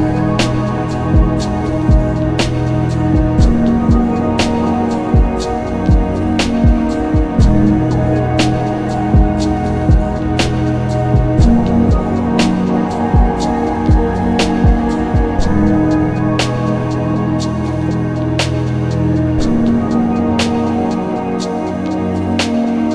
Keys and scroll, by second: 0.0 ctrl+alt+z, 0.4 typing, 2.7 ctrl+z, 5.0 typing, 13.8 ctrl+alt+z, 14.9 ctrl+alt+shift+z, 19.2 alt+z, 22.8 ctrl+z.